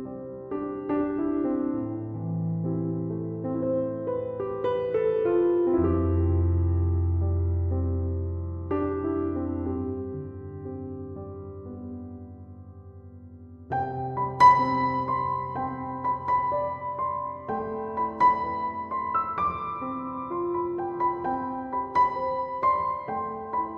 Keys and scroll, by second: 6.0 BackSpace, 8.9 ., 9.5 7, 9.7 5, 10.1 Return, 13.4 2, 14.0 5, 14.3 Return.